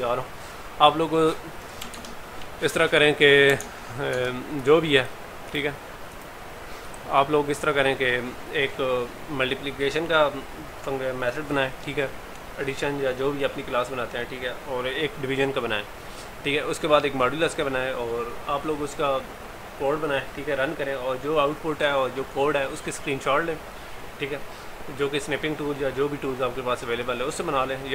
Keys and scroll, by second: 2.0 alt+Tab.